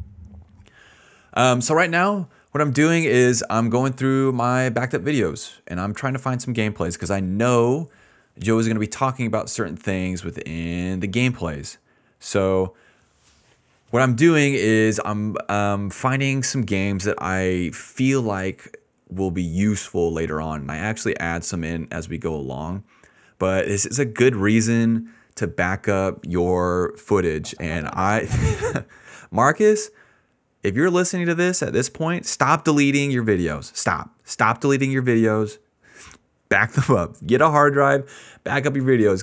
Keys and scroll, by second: 27.3 space, 28.6 space, 29.8 s, 30.1 d.